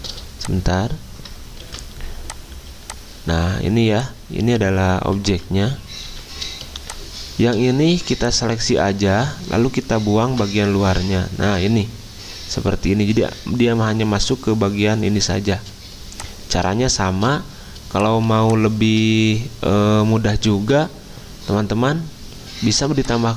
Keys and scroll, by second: 1.6 ctrl+2, 5.3 ctrl+z, 6.1 d, 8.9 typing, 10.2 m, 14.4 m, 17.2 v.